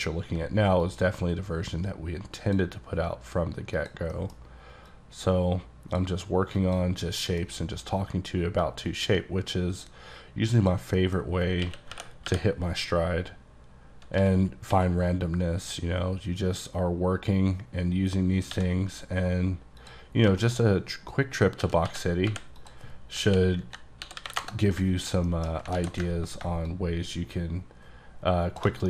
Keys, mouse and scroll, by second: 0.9-2.8 drag, 3.8 click, 4.2 middle click, 5.0 click, 6.6 click, 7.3 middle click, 7.4 scroll down 1, 8.7 click, 10.2-10.6 scroll down 2, 10.6 click, 11.0 middle click, 11.7-12.3 typing, 13.2-14.2 scroll down 1, 14.2-14.8 typing, 18.6 c, 19.9 click, 20.2-21.7 scroll down 3, 20.5 shift+middle click, 21.7-24.2 typing, 22.7 click, 24.4 KP_Enter, 25.3 shift+middle click, 25.7 scroll up 1, 25.8 w, 26.7 ctrl+shift+click, 27.0 ctrl+shift+click, 27.9 ctrl+shift+click.